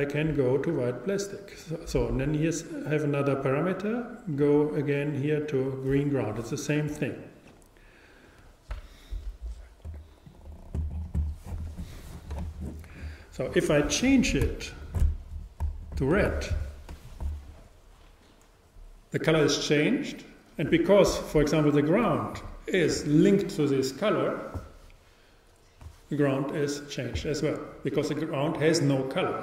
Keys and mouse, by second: 4.1-29.4 drag.